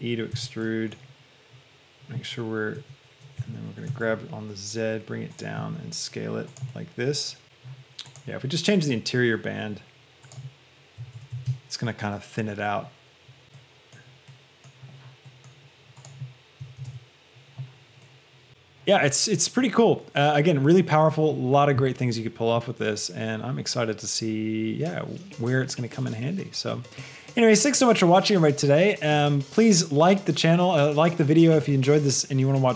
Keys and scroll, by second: 0.7 Escape, 2.8 s, 3.7 Escape, 3.9 g, 4.3 z, 5.9 s, 7.4 Return, 7.4 KP_1, 11.4 Return, 16.7 KP_1, 17.1 Return.